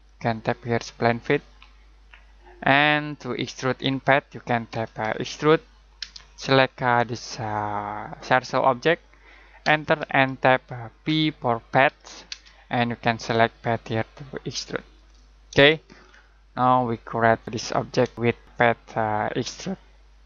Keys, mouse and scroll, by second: 1.4 click, 4.7 click, 4.8-6.0 typing, 6.3-6.8 scroll up 1, 8.1 click, 9.6 space, 11.0 p, 12.3 space, 14.8 click, 15.7 middle click.